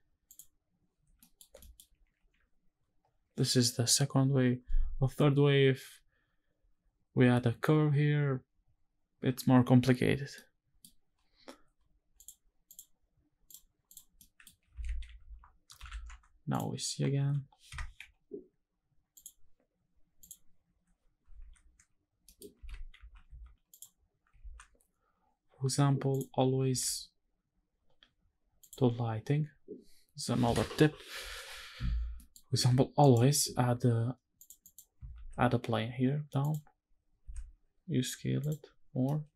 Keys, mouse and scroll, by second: 0.0 click, 0.7 scroll down 2, 0.9 middle drag, 1.3 shift+middle click, 10.1-10.5 middle drag, 11.8 click, 12.3-13.6 drag, 13.9 middle click, 14.6 shift+`, 16.8 b, 17.7 n, 18.9 click, 19.9 click, 21.0 ctrl+s, 21.9 middle click, 22.3 shift+`, 24.2 ctrl+s, 25.8 click, 26.3 ctrl+s, 26.6-27.2 scroll down 2, 27.2-28.3 scroll up 3, 28.3 drag, 31.7 scroll down 2, 31.9 middle click, 32.8 shift+right click, 33.0 shift+a, 34.1 click, 34.3 click, 34.8 shift+a, 36.6 scroll down 2, 37.0 s, 38.1 click, 38.8 middle click.